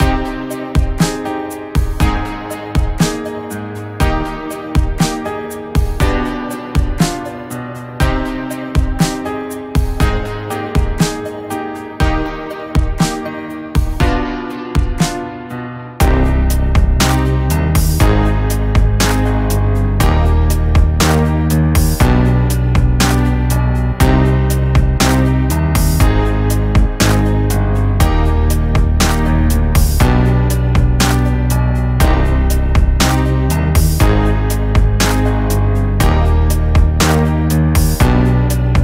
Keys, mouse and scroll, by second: 28.1 click, 33.1 click.